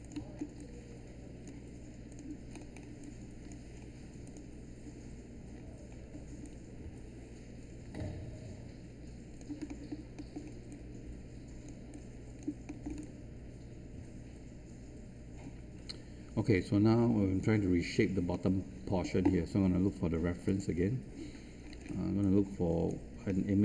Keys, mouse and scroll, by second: 2.0 click, 2.4-2.9 scroll up 1, 2.9 alt+click, 3.7-4.2 scroll up 1, 4.2 click, 5.5-6.1 scroll down 1, 6.4-9.3 alt+drag, 9.6 alt+middle click, 10.1 alt+middle click, 10.6 alt+click, 12.6 alt+middle click, 13.7-18.1 alt+drag, 18.3 alt+middle click, 20.4 click, 21.6-22.2 scroll down 1, 22.2 click, 23.2-23.6 middle drag.